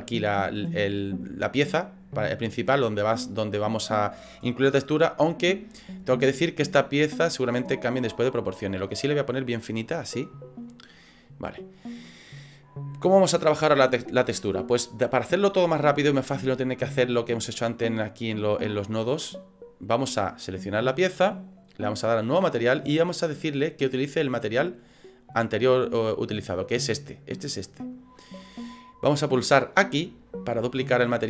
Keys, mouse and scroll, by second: 1.2 scroll down 3, 1.7 scroll down 3, 2.1 middle click, 2.6 scroll up 3, 6.1 scroll up 2, 7.3 click, 9.1 middle click, 10.8 middle click, 11.1 scroll down 3, 12.6 middle click, 19.4 click.